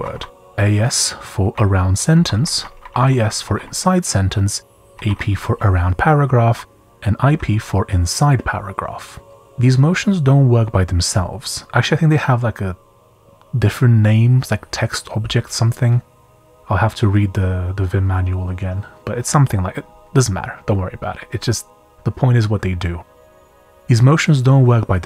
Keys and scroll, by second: 7.4 typing.